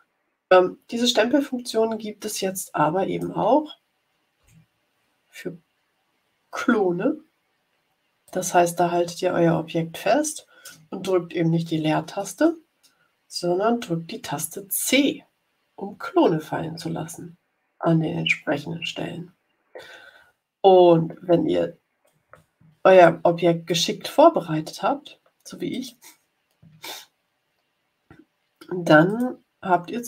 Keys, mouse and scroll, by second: 1.6-3.4 drag, 4.3 Delete, 8.2-22.3 drag, 14.8 c, 15.8 c, 16.8 c, 17.7 c, 18.6 c, 22.9 click, 25.6 click, 29.0 click.